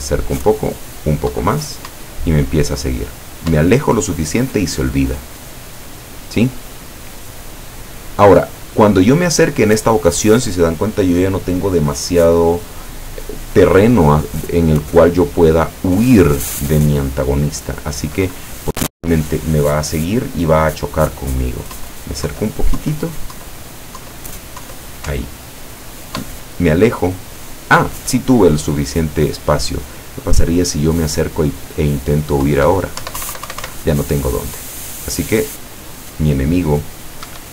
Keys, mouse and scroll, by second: 1.3 Down, 2.0 Up, 21.9 Down, 25.2 Up, 32.5 Down, 33.1 Up, 37.3 Escape.